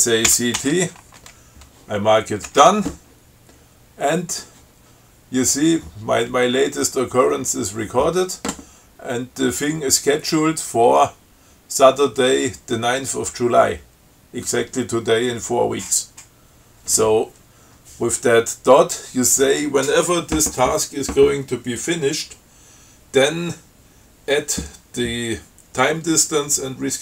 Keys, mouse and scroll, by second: 0.5 ctrl+c, 0.8 ctrl+t, 2.7 d.